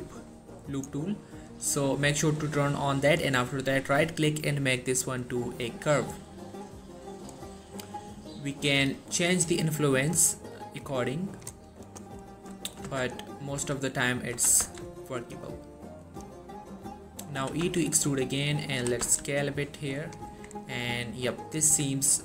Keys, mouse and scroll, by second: 1.6 click, 3.2 right click, 5.3 click, 6.0 z, 8.2-11.7 drag, 12.7 shift+middle click, 13.0 z, 13.7 z, 14.4 g, 14.7 z, 16.2 click, 17.5 e, 17.7 s, 18.8 click, 18.9 g, 19.2 z, 20.1 click, 20.4 Tab, 20.7-21.4 scroll down 1, 21.4-21.8 scroll up 1, 21.8 Tab.